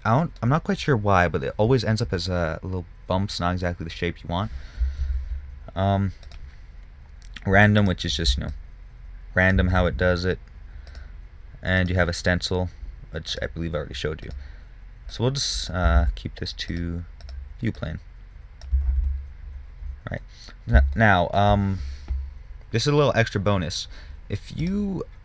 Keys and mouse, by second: 5.5 ctrl+z, 6.6-8.6 drag, 9.4-10.0 drag, 10.1 ctrl+z, 13.2 middle click, 13.6-19.4 drag, 16.4 ctrl+z, 19.4 ctrl+z, 20.8 middle click.